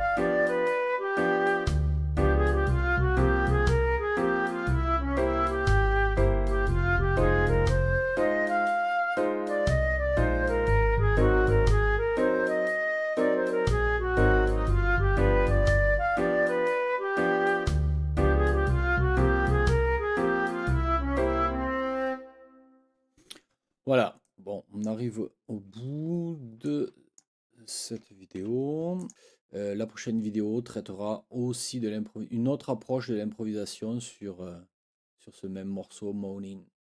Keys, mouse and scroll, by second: 24.2 click, 26.6 click, 28.4 ctrl+z, 29.0 click.